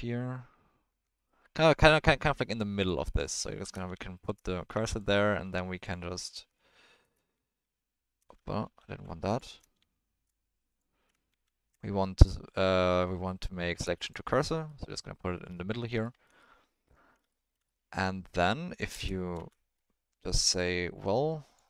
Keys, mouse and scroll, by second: 3.0 middle click, 3.9 shift+s, 4.7 Tab, 4.9 click, 5.4 Tab, 7.3 shift+s, 8.6 ctrl+z, 9.3 click, 9.7 shift+s, 11.3 shift+s, 14.7-15.9 middle drag, 16.0 ctrl+middle drag, 16.4-17.2 middle drag, 17.7-18.8 middle drag, 18.9 space, 19.3 space, 19.5 middle drag, 20.6-21.5 drag.